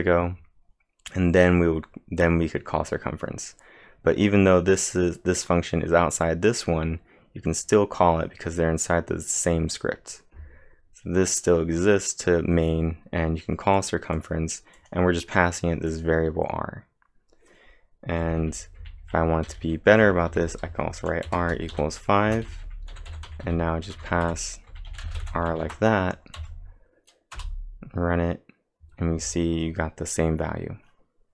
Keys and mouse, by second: 13.8 click, 14.2 click, 14.8 click, 18.0-25.4 typing, 20.0 Return, 25.6 ctrl+`, 26.4 Up, 27.4 Return.